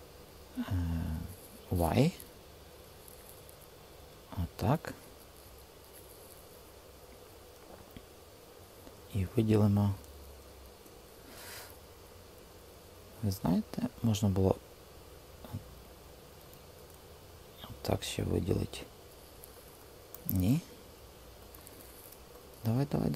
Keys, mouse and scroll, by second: 1.8 y, 10.4 space, 13.1-15.3 super+drag, 16.4 super+z, 20.0 super+z.